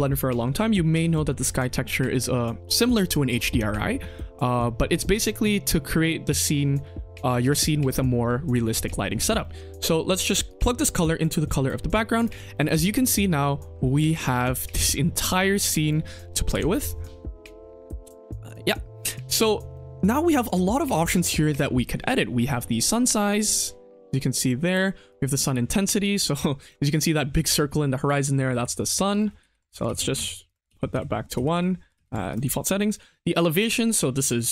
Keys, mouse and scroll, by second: 0.0-0.4 middle drag, 0.4-1.0 scroll up 2, 1.0 middle click, 9.3 middle click, 10.4-11.6 drag, 12.1 click, 12.5 middle click, 12.7-13.7 scroll down 3, 13.2 middle click, 13.7-14.3 scroll up 5, 14.4 shift+middle click, 14.9-15.2 scroll up 2, 15.2 shift+middle drag, 15.8 click, 16.4 Home, 17.1 middle click, 17.4-17.8 scroll down 2, 17.8 middle click, 18.1 scroll up 1, 18.3 scroll down 1, 18.4 click, 19.6 middle click, 20.1-20.7 scroll up 5, 20.7 middle click, 22.5-24.8 drag, 25.0 click, 26.0 click, 26.9-27.5 scroll down 3, 27.5-28.5 scroll up 4, 29.0 ctrl+click, 29.8 ctrl+z, 30.1 ctrl+z, 30.4 ctrl+click, 30.7 ctrl+z, 30.9 ctrl+z, 31.9 ctrl+z, 32.2 click, 32.8-34.5 drag.